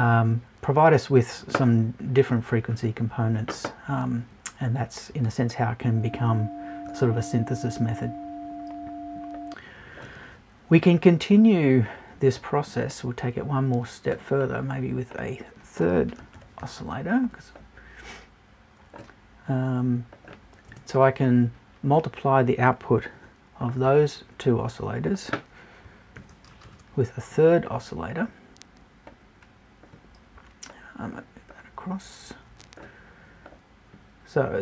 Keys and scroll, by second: 20.7 BackSpace.